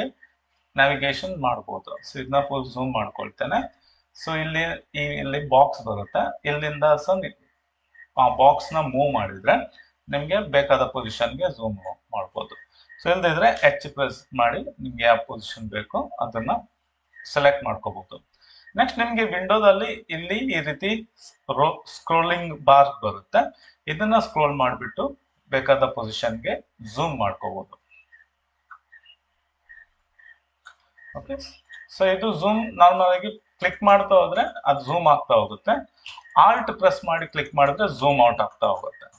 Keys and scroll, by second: 13.7 h.